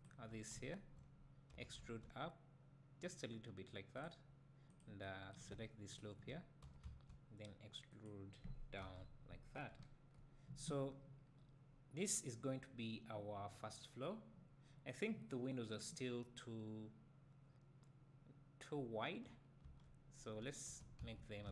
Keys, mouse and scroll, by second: 1.5 e, 3.1 click, 4.0 click, 5.9 ctrl+click, 6.6 e, 8.0 click, 9.0 Tab, 9.7 KP_1, 11.2-12.9 scroll down 1, 19.1-19.6 scroll up 1, 19.6 Tab, 20.7 1, 21.0 z.